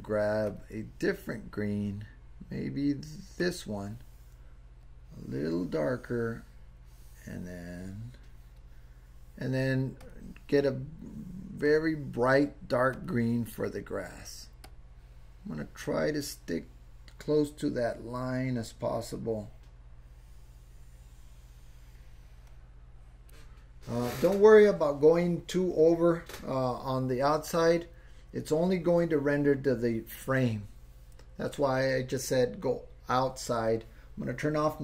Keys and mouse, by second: 0.5 click, 4.8-8.6 drag, 10.0 click, 11.7 click, 14.6-23.3 drag.